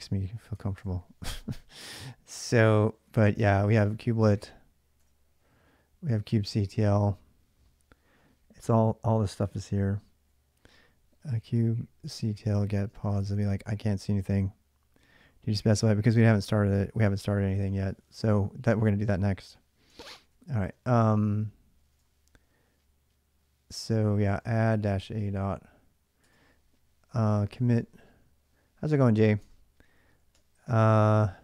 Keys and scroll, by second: 0.3 ctrl+[, 0.5-1.2 typing, 2.8-4.8 typing, 5.8-6.9 typing, 10.7-13.4 typing, 19.9 ctrl+a, 20.1 ctrl+a, 21.4-22.2 typing, 23.7-25.2 typing, 26.0 Return, 26.8-27.6 typing, 29.2 Return, 29.8-31.4 typing.